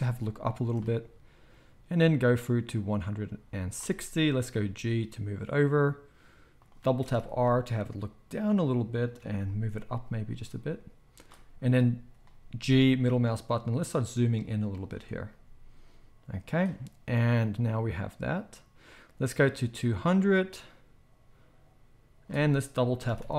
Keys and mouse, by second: 0.6 shift+middle click, 2.2-6.6 drag, 2.2-6.6 middle drag, 2.2-18.6 right drag, 4.5 g, 7.0 r, 9.9 g, 12.6 g, 15.3 g, 17.4-18.6 drag, 23.0 r.